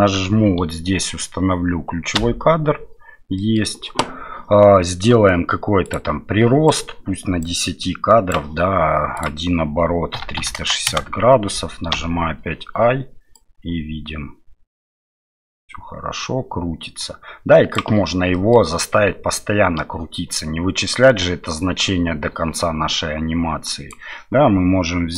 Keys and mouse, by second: 2.2 i, 3.4 middle click, 5.8 click, 7.4 click, 9.1-12.4 drag, 13.3-17.8 drag, 18.3 middle click, 19.3-23.9 drag.